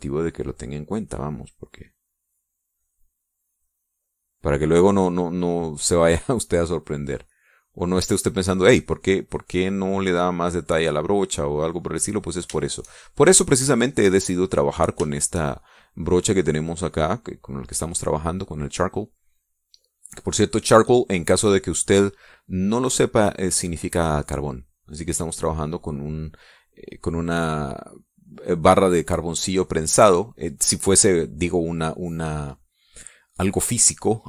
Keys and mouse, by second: 6.1 click, 8.1-13.3 drag, 13.4-15.8 shift+drag, 15.9 shift+click, 17.3 click, 18.8 middle click, 20.3 middle click, 22.7-29.8 drag.